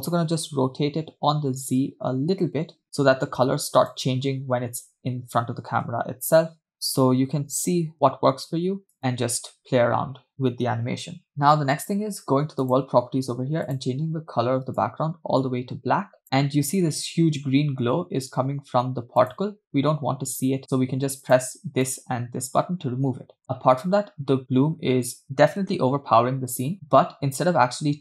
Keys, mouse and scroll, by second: 0.1 r, 5.9 r, 9.0 space, 12.6 click, 13.7 click, 19.2 click, 21.3 click, 21.9 click, 23.5 space, 24.1 space.